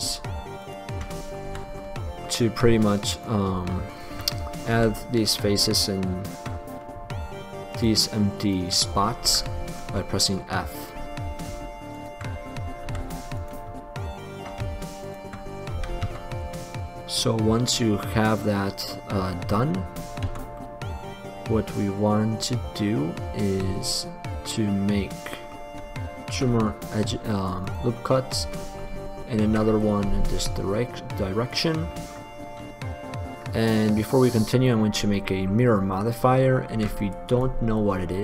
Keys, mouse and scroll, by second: 1.7 f, 3.8-4.8 drag, 5.0 f, 9.5 f, 13.1 f, 15.9 f, 16.3 Tab, 18.3-19.1 middle drag, 20.5 Tab, 24.9 middle click, 26.5 ctrl+r, 27.9-28.9 drag, 29.8 ctrl+r, 30.2-31.7 scroll up 1, 32.1-33.6 middle drag, 36.9 ctrl+r.